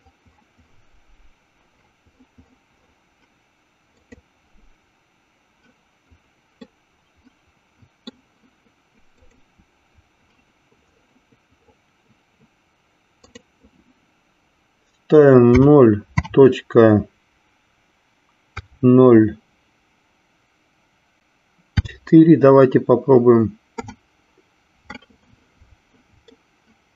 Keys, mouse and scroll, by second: 6.8-8.3 middle drag, 9.6 click, 13.2-25.1 drag, 26.6 shift+middle click.